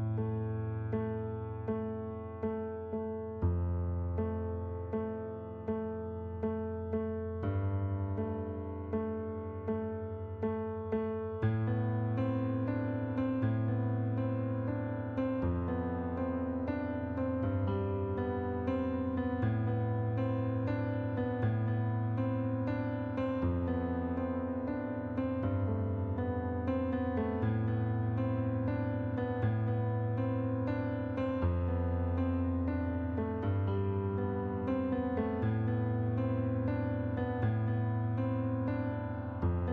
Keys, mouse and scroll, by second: 0.4 click, 1.6 click, 2.9 click, 3.8 click, 4.6 click, 5.5 click, 6.2 click, 8.8 click, 10.4 right click, 12.8 shift+click, 13.8 click, 14.7 click, 15.7 click, 17.4 right click, 18.2 click, 19.4 click, 20.3 click, 21.2 middle click, 22.5 right click, 23.4 click, 24.0 shift+click, 24.9 click, 25.8 click, 26.9 click, 28.2 click, 29.2 click, 31.1 click, 31.9 click, 33.4 shift+click, 36.7 click, 37.1 middle click, 37.7 click, 38.9 click.